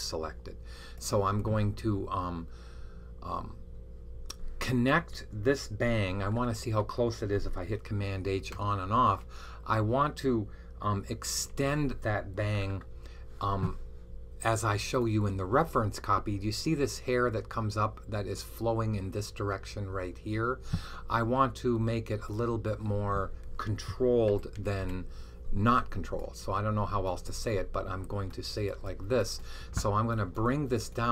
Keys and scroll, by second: 8.3 super+h, 11.4 h, 24.2-24.7 typing.